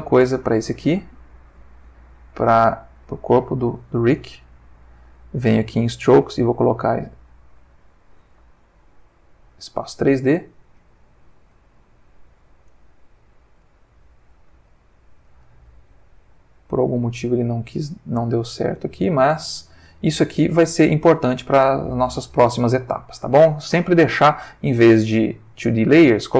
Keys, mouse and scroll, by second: 3.1 click, 4.6 middle click, 6.6 click, 7.6 click, 8.8-9.8 ctrl+middle drag, 10.0 ctrl+click, 10.8 g, 11.8 Escape, 12.7 click, 13.7-17.1 middle drag, 17.5 click, 18.2 g, 19.1 Escape, 19.5-20.6 middle drag, 20.7 ctrl+middle click, 21.2-22.8 ctrl+middle drag, 22.9 ctrl+shift+middle click, 25.3 click, 26.1 click.